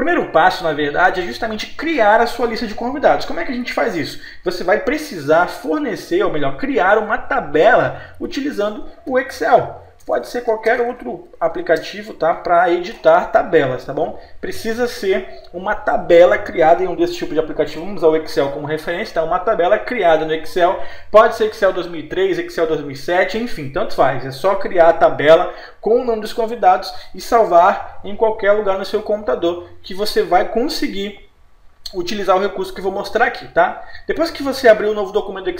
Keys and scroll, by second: 10.0 BackSpace, 12.0 Return.